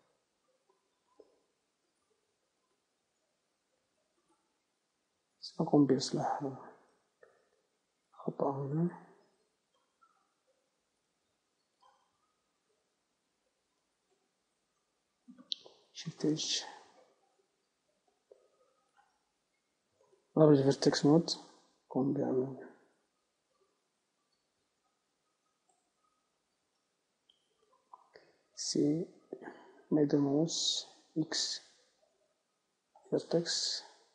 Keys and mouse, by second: 1.5-6.6 right drag, 6.0 Tab, 11.1 middle click, 15.0 Tab, 16.4 shift+h, 17.3 Tab, 20.4-22.4 drag, 22.4 b, 27.2-31.4 middle drag, 28.6 c, 31.4-32.4 right drag, 31.4 x, 34.0-34.1 middle drag.